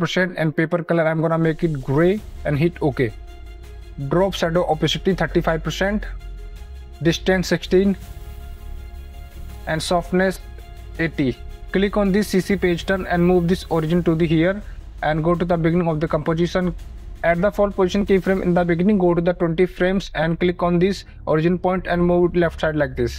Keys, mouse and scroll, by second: 0.2 click, 1.0 click, 2.0 click, 3.0 click, 3.7 scroll, 4.3 click, 6.3 KP_3, 6.5 KP_5, 6.8 Return, 8.2 click, 8.7 KP_1, 8.8 KP_6, 9.2 Return, 10.0 click, 10.7 KP_8, 11.0 KP_0, 11.2 Return, 11.4 click, 15.0 click, 16.0 click, 20.2 click.